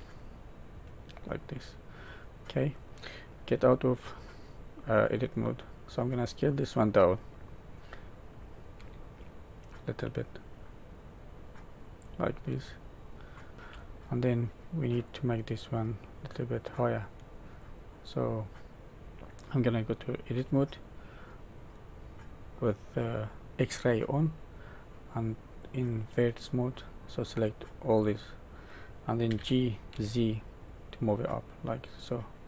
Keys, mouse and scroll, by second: 1.4 middle click, 3.4 Tab, 4.0 middle click, 5.4-6.1 scroll up 2, 6.6 scroll up 2, 8.7 s, 12.3 middle click, 13.5 shift+middle click, 13.5 scroll down 4, 14.1 middle click, 15.3 middle click, 17.8 scroll down 1, 18.3 middle click, 20.3 Tab, 23.7 click, 25.5 click, 27.0 click, 29.2 g.